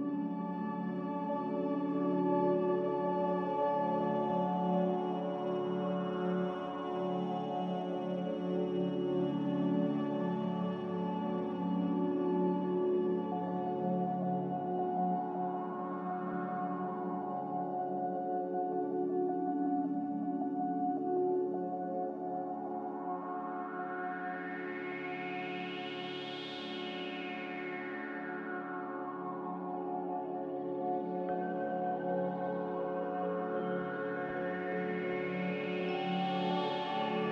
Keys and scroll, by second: 2.8 r, 4.9 z, 8.8 5, 10.1 Return, 13.6 z, 15.2 4, 15.3 Return, 23.2 a, 26.7 r, 29.8 a, 33.3 ctrl+c, 36.6-37.3 typing.